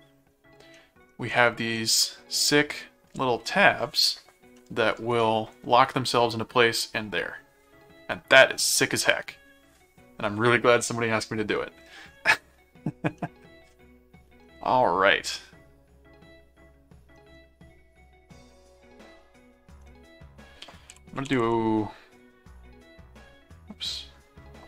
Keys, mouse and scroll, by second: 0.7 middle click, 1.8 middle click, 2.9-3.5 scroll up 2, 4.6 middle click, 13.1 middle click, 14.5-17.2 middle drag, 20.7-21.8 typing.